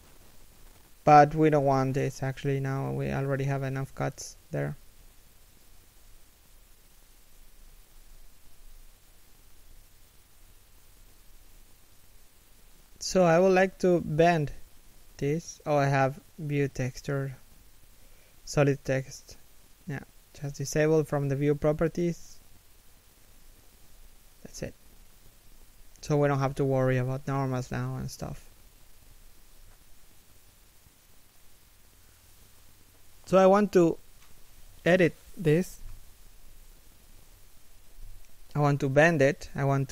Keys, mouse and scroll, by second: 5.0-5.6 scroll up 1, 5.9 scroll up 1, 7.2-7.6 scroll down 1, 7.6 shift+middle click, 10.0 a, 11.2-11.6 scroll down 1, 11.6 shift+middle click, 11.9-12.4 scroll up 1, 12.4 shift+middle click, 14.5 middle click, 14.9 z, 15.0 middle click, 16.6 middle click, 24.1 KP_1, 24.5 z, 25.8 a, 26.5 middle click, 27.2 1, 31.7 a, 34.1 alt+right click, 34.9 alt+shift+middle click, 36.6 r.